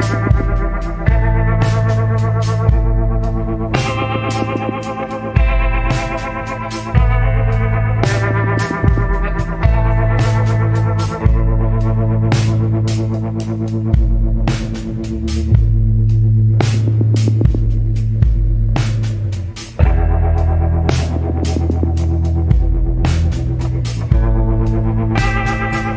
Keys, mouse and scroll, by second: 8.3 scroll up 1, 9.1 scroll down 1, 11.0 scroll up 1, 13.0 scroll down 1, 25.6 scroll down 1.